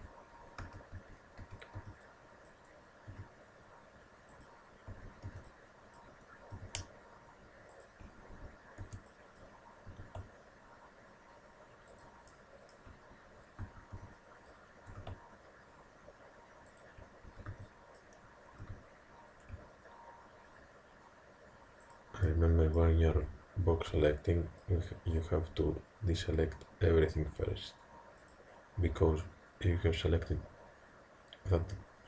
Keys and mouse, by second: 0.7 a, 1.0 a, 1.8 b, 3.1 g, 4.9 a, 5.3 b, 6.6 g, 8.3 a, 8.8 b, 10.0 g, 12.3-14.9 drag, 13.7 a, 14.0 b, 14.9 g, 17.3 a, 18.6 g, 22.4-26.2 middle drag, 23.2 a, 23.9 b, 26.2 g.